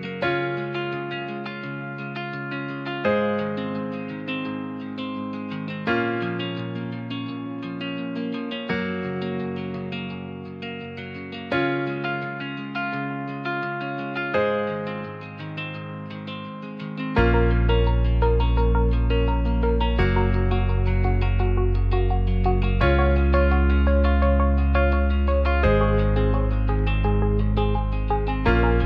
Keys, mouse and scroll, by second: 0.1 z, 0.4 KP_0, 0.8 KP_Enter, 1.2 a, 1.8 m, 3.0 middle click, 3.6 Tab, 7.9-9.1 drag, 9.8 click, 11.3-11.7 middle drag, 14.8-15.2 right drag, 15.6-16.6 right drag, 17.4 drag, 19.4 click, 20.4-22.1 drag, 23.9-24.2 drag, 24.7 middle click, 26.3 middle drag, 27.0 right click, 27.4-27.8 middle drag, 27.9-28.7 right drag.